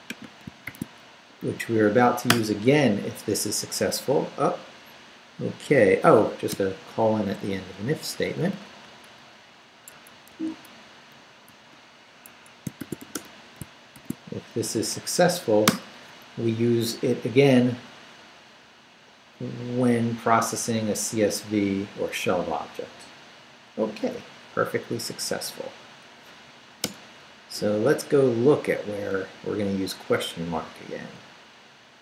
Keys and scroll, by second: 0.6 shift+;, 1.1 shift+Up, 2.3 Return, 6.5 Return, 7.4 Up, 7.8 Down, 8.1 Up, 9.0 Down, 9.9 Escape, 10.3 shift+a, 11.5 shift+;, 12.2 shift+Home, 12.5-13.9 typing, 14.5 shift+Up, 15.6 Return, 26.8 Return, 27.6 Up.